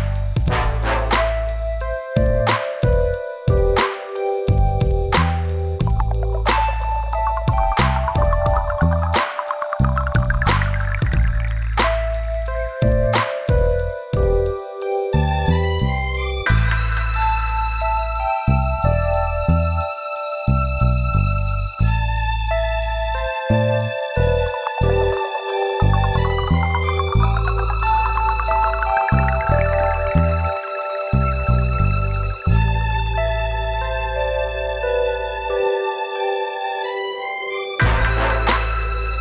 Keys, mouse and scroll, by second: 0.1 click, 0.7 click, 1.0 click, 2.0 click, 2.4 scroll down 2, 3.2 click, 4.9 scroll down 2, 7.2 click, 8.7 click, 16.1 scroll up 1, 27.9 middle click, 28.8 scroll up 2, 30.6 scroll down 2.